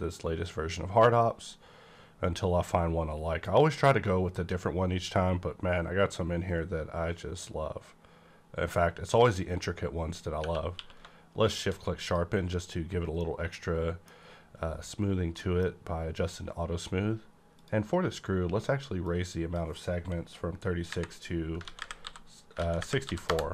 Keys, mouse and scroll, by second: 4.9-7.8 scroll up 1, 9.2 click, 10.7 q, 11.4 click, 12.0 click, 13.1 middle click, 13.2-15.3 middle drag, 14.1-15.3 scroll up 1, 15.3 middle click, 17.5 click, 19.0-21.6 drag, 20.8 KP_3, 21.6 ctrl+a, 21.8 ctrl+KP_6, 22.0 KP_4, 22.6 a, 22.8 KP_6, 23.0 KP_4, 23.2 KP_Enter.